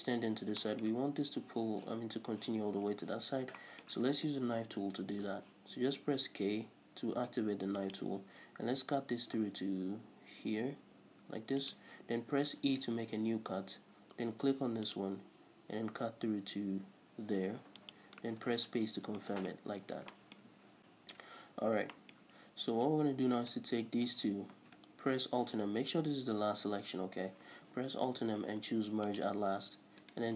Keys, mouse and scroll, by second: 2.9-3.5 scroll up 2, 4.4 k, 18.3 space, 18.8 scroll down 1, 19.1 shift+middle click, 19.7-23.4 middle drag, 19.7-20.8 scroll up 4, 21.6-22.0 scroll up 2, 23.4 right click, 24.0 shift+right click, 27.9 alt+m, 30.0 right click.